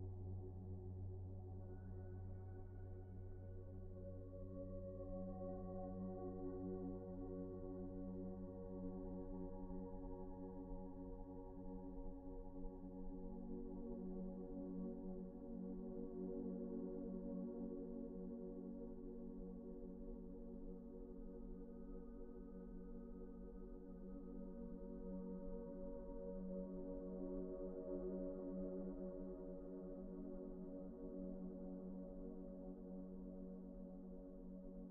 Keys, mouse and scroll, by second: 0.5 1, 1.2-1.7 scroll up 1, 3.1 s, 5.2 Return, 6.1 typing, 7.0 Return, 7.7 typing, 8.1 Return, 9.3 typing, 9.7 Return, 10.8-11.5 typing, 11.5 Return, 11.7 Escape, 12.4 ctrl+z, 13.1-13.9 typing, 13.6 Return, 15.3 Return, 18.0 typing, 19.0 Return, 19.3 typing, 20.4 Return, 20.9 ctrl+z, 21.6 typing, 23.4 Return, 24.0 typing, 25.0 Return, 26.1 typing, 26.5 scroll down 1, 27.0-27.5 scroll up 1, 27.5 right click, 28.0 Escape, 28.9 scroll down 1, 29.2-29.8 scroll up 1, 29.8-30.4 scroll down 1, 31.1-32.4 typing, 31.6 Return, 33.6-34.2 scroll down 1, 34.2 Tab.